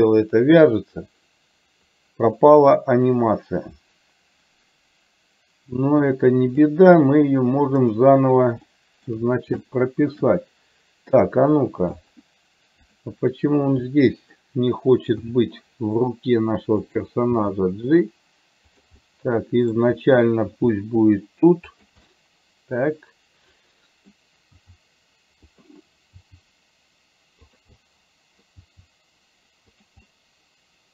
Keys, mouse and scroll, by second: 7.9 click, 8.8 shift+middle click, 9.8 shift+middle click, 11.3 click, 13.9 middle click, 17.1 r, 17.6 g, 19.1 middle click, 22.2-24.2 middle drag, 24.7 r, 26.2 g, 27.8 middle click, 28.7 g, 30.1-30.9 middle drag, 30.1-30.9 scroll up 1.